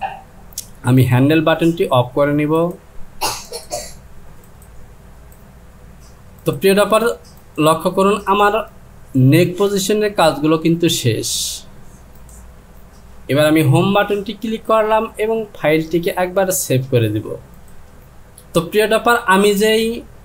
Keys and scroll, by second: 13.7 Home, 18.4 Return.